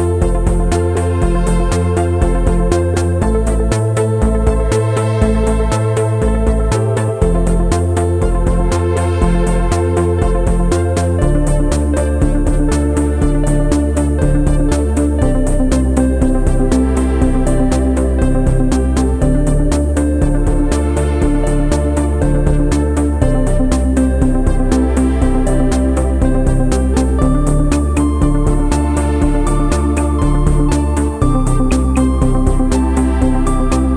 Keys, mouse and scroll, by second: 0.7 click, 1.2 click, 1.3 scroll down 6, 1.4 ], 1.5 ], 1.5 click, 1.9 middle click, 1.9 scroll down 1, 2.0 scroll up 1, 2.0 ], 2.1 ], 2.1 click, 2.2 middle click, 2.3 click, 2.7 middle click, 2.8 click, 3.3 middle click, 3.4 click, 3.7 click, 3.9 middle click, 4.0 scroll up 4, 4.0 click, 4.2-5.2 typing, 4.4 click, 4.4 scroll down 3, 4.6 scroll up 2, 4.7 click, 5.0 scroll down 2, 5.1 middle click, 5.2 click, 6.0 middle click, 6.1 middle click, 6.2 click, 6.5 click, 6.6 click, 6.8 click, 7.0 shift+middle click, 7.0 shift+scroll up 1, 7.0 middle click, 7.4-14.2 typing, 7.7 middle click, 7.9 middle click, 8.1 middle click, 8.8 middle click, 9.8 middle click, 10.3 shift+middle click, 10.9 shift+click, 11.5 middle click, 11.7 shift+click, 11.8 shift+click, 12.7 click, 13.4 middle click, 14.5 shift+click, 14.6 shift+click, 19.7 click, 19.7 shift+middle click, 19.7 scroll down 1, 19.8 middle click, 20.0 click, 20.2 click, 20.7 click, 21.6 ctrl+a, 21.6 click, 21.7 click, 22.1 click, 23.1 ctrl+a, 23.3 ctrl+a, 23.4 middle click, 23.6 shift+middle click, 23.6 scroll down 7, 23.7 shift+middle click, 24.0 shift+middle click, 24.0 scroll up 5, 24.4 scroll down 1, 24.6 shift+middle click, 24.6 g, 31.5 scroll down 1, 31.6 scroll up 2, 31.9 shift+middle click, 31.9 scroll down 6, 32.0 scroll up 4, 32.2-32.5 scroll down 8, 32.5 click, 32.6 click, 33.9 middle click.